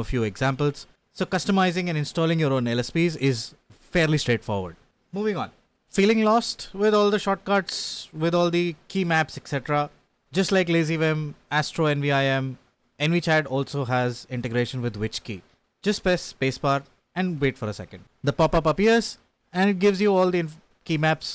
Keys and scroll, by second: 0.0-3.0 typing.